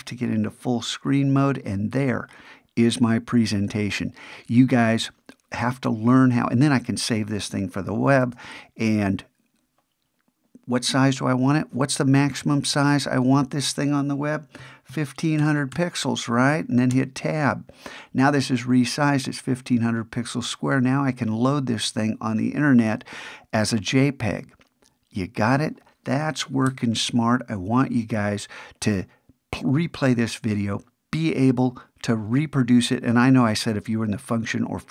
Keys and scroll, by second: 8.2 alt+shift+super+s.